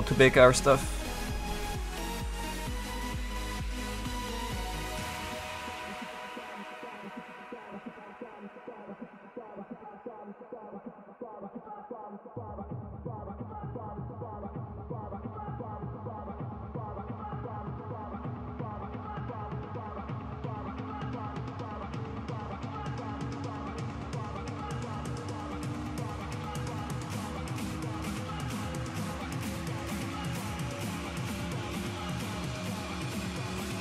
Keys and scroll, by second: 19.3 s, 24.2 ctrl+z, 28.8 z, 33.1 s.